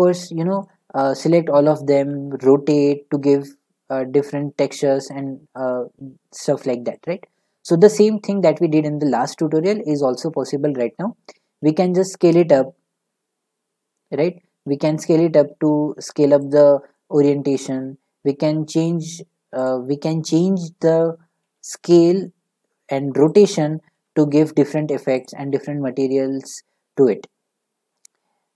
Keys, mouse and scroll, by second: 0.6 middle click, 1.6 middle click, 2.1 r, 3.6 middle click, 5.1-6.9 drag, 6.9-10.0 middle drag, 10.1 s, 12.0 s, 16.5-17.5 drag, 17.5-19.1 middle drag, 18.2 s, 19.6 right click, 21.3-22.7 right drag, 21.4 s, 22.7 middle click, 23.3-23.8 drag, 24.2-27.1 drag, 27.1-28.5 middle drag.